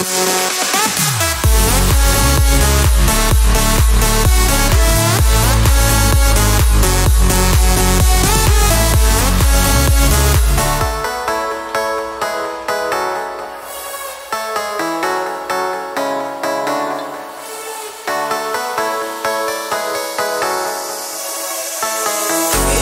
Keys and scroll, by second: 2.9 ctrl+z, 5.3 4, 5.3 Return.